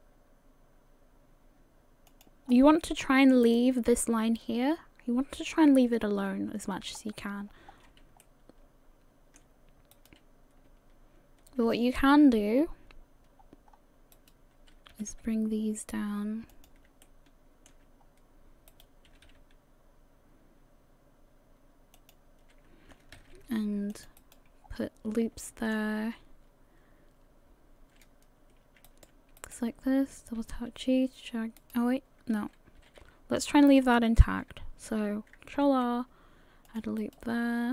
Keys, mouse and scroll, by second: 2.5-3.4 scroll down 4, 7.0-7.4 scroll up 1, 7.5-8.0 scroll up 1, 8.2 shift+middle click, 9.9 right click, 12.5-13.1 scroll down 2, 13.7-14.1 scroll up 1, 14.1 right click, 14.9 g, 17.0 shift+middle click, 17.4 shift+middle click, 18.0-18.7 scroll up 2, 18.7 right click, 19.1 g, 23.1 ctrl+r, 24.6 scroll down 2, 25.4 shift+middle click, 28.9 right click, 29.4 shift+right click, 30.2 g, 32.8 a, 33.0 a, 35.6 ctrl+r.